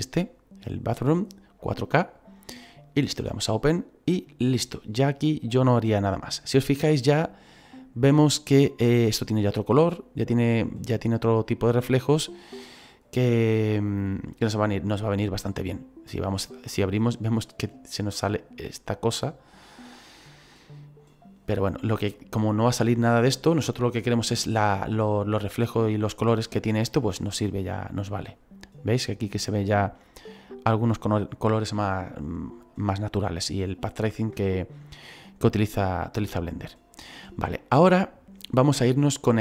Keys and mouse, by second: 2.1 click, 3.5 click, 16.9 middle click, 25.3 middle click, 26.6 middle click, 29.9 middle click, 36.6 shift+middle click.